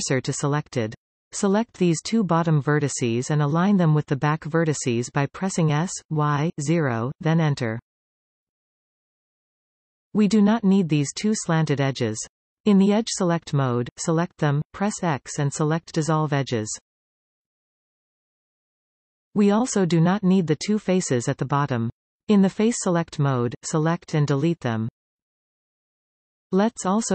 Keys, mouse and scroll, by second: 0.9-2.2 middle drag, 2.2 click, 2.9 shift+click, 5.6 s, 10.5 click, 11.7-13.9 middle drag, 13.9 shift+click, 14.2-15.7 middle drag, 15.7 x, 19.2-21.7 middle drag, 21.7 click, 22.4 click, 22.8 shift+click, 23.7 x, 26.4 click.